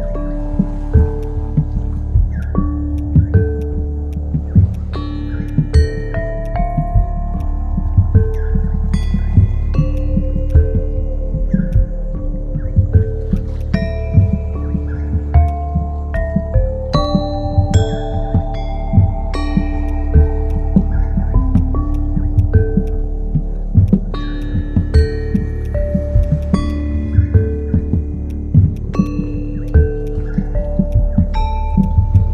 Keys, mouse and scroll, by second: 7.2 ctrl+z, 9.3 ctrl+z, 21.9 ctrl+click.